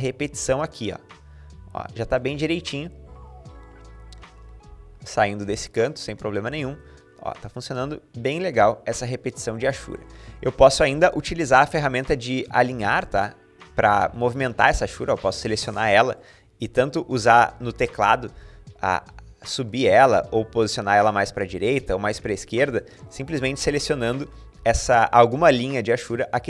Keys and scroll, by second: 2.9 Escape, 14.2 Tab, 16.1 Up, 16.5 Up, 16.6 Up, 16.8 Up, 17.0 Up, 17.2 Up, 17.3 Up, 17.5 Up, 17.6 Up, 17.8-18.9 typing, 20.1-22.9 typing, 25.7 Tab.